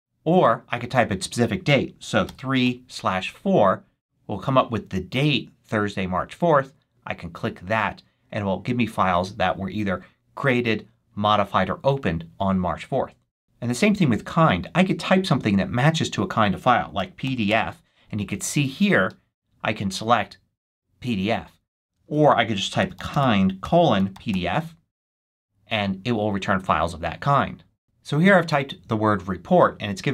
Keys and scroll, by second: 1.7-3.0 typing, 16.6-17.9 typing, 22.0 super+a, 22.6-24.7 typing.